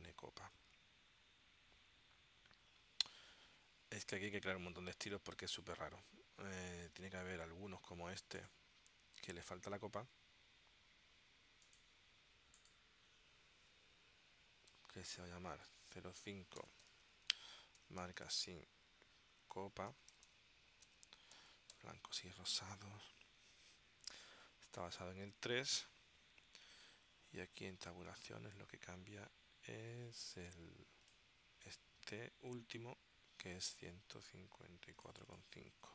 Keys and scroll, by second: 14.9-22.7 typing.